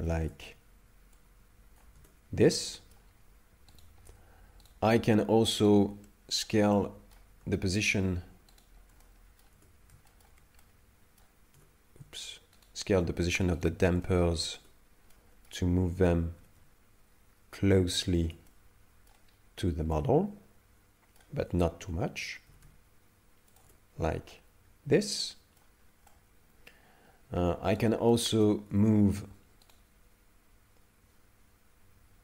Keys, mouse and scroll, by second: 0.2 Tab, 1.2 click, 2.0 Tab, 2.5 middle click, 3.8 right click, 4.7 right click, 5.7 shift+right click, 5.8 shift+right click, 6.1 middle click, 6.8 middle click, 7.8 shift+right click, 7.8 shift+right click, 8.7 shift+right click, 9.0 middle click, 9.6 Tab, 10.1 shift+middle click, 10.6 middle click, 11.6 Tab, 12.6 shift+right click, 13.7 shift+right click, 14.0 middle click, 14.6 Tab, 15.1 middle click, 16.4 s, 18.2 Tab, 18.5 middle click, 19.3 scroll up 1, 19.9 middle click, 21.4 Tab, 22.5 s, 23.7 Tab, 24.3 middle click, 25.8 scroll down 3, 26.1 middle click, 27.8 right click, 28.1 middle click, 28.7 Tab, 29.7 right click, 30.9 right click.